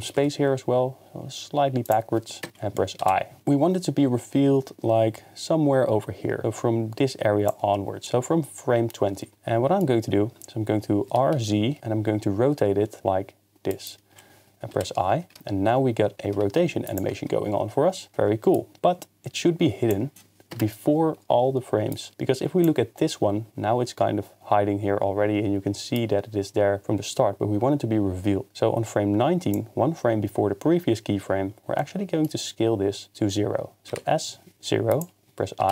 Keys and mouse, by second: 0.2 y, 2.4 KP_0, 3.0 i, 11.1 r, 11.3 z, 13.7 click, 14.7 i, 16.2 shift+space, 16.9 click, 18.5 click, 20.5 KP_0, 21.9 click, 28.5 click, 28.5 shift+space, 31.8 middle click, 33.9 s, 34.5 0, 34.9 click, 35.6 i.